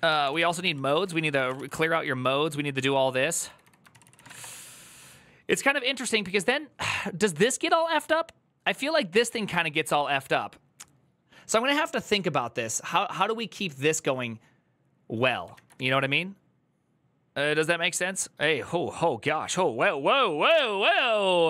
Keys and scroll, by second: 0.0-1.2 typing, 3.2 typing.